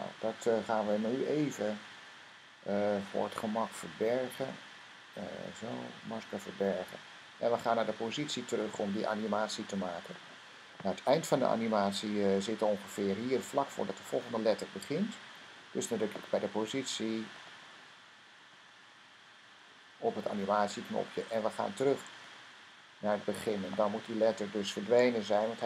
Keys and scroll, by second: 3.9 m, 5.6 m, 7.5-8.4 typing.